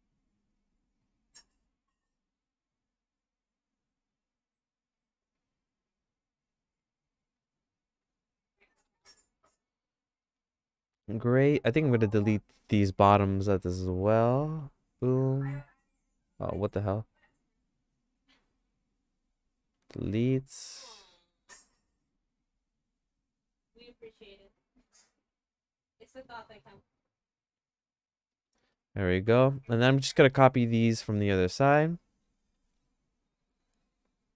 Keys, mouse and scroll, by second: 1.5 click, 5.3 click, 7.6 click, 8.0 click, 8.8 middle click, 9.4-11.9 shift+middle drag, 14.5 x, 16.4 right click, 17.3 right click, 18.4 click, 19.0 click, 19.7 x, 22.2 click, 25.2 middle click, 25.6 middle click, 27.5 x, 28.3 middle click, 28.7-29.9 shift+middle drag, 30.8 middle click, 31.2-32.7 shift+middle drag.